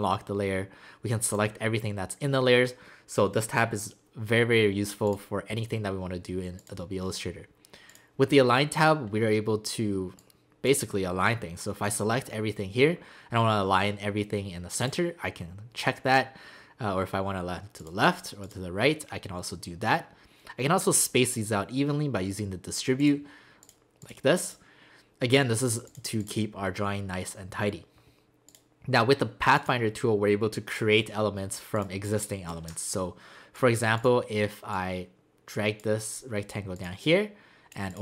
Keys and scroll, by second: 32.3 space.